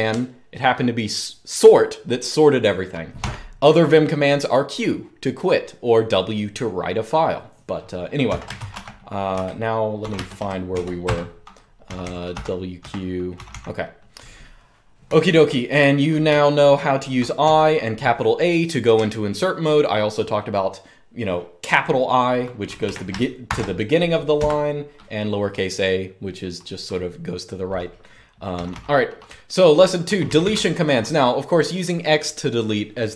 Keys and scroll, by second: 2.9 u, 7.8-13.2 typing, 14.8-17.2 typing, 22.4-23.2 typing, 24.2 Escape, 28.3-30.1 typing.